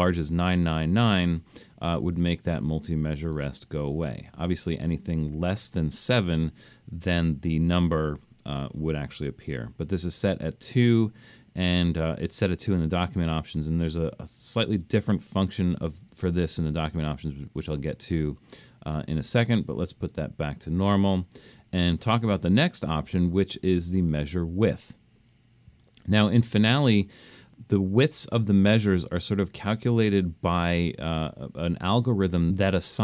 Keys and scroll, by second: 9.2 2.